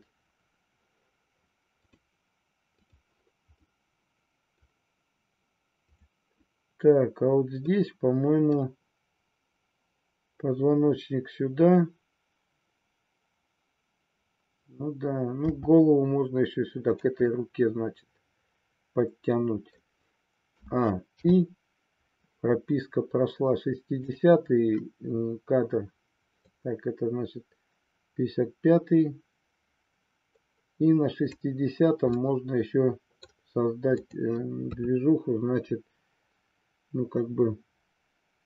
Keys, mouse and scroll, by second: 3.6-4.5 middle drag, 7.7 middle click, 15.4 r, 16.9 click, 17.3-19.8 middle drag, 20.5 a, 21.2 i, 24.0 click, 26.4-31.3 drag, 32.0-33.3 middle drag, 33.9-35.1 drag, 35.2 KP_3.